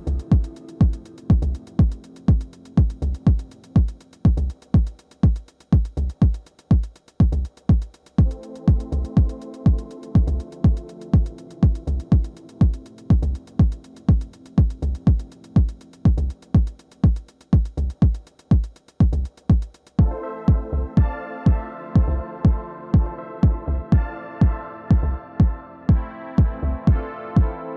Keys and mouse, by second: 0.1-1.2 middle drag, 3.8 middle click, 5.4 middle click, 5.9-10.2 drag, 10.0 alt+w, 12.9 f, 14.0-26.2 drag, 26.2-27.7 middle drag.